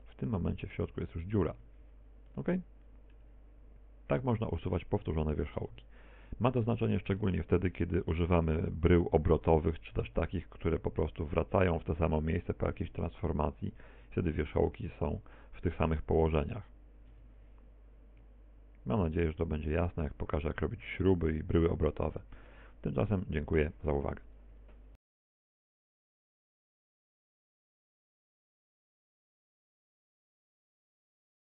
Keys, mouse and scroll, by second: 0.9 Tab, 1.6 z, 3.5 x, 7.0 a, 7.2 z, 7.9 a, 8.2 z, 8.7 middle click, 23.5 Tab.